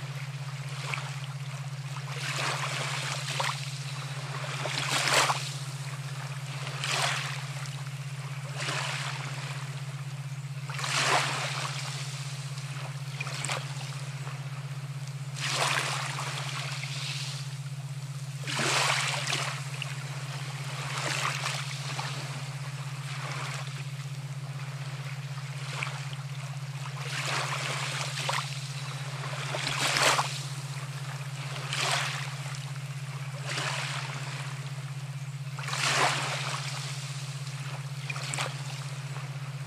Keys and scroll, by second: 1.5 ctrl+t, 30.6 ctrl+a, 31.4 ctrl+c, 31.7 ctrl+v, 34.1 ctrl+t.